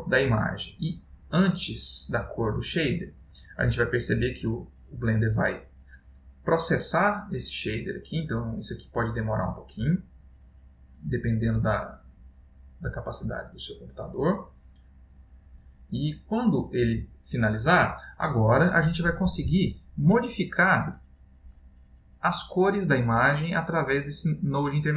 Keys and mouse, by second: 1.8 click, 20.4 ctrl+middle click, 21.8 click, 23.7 click.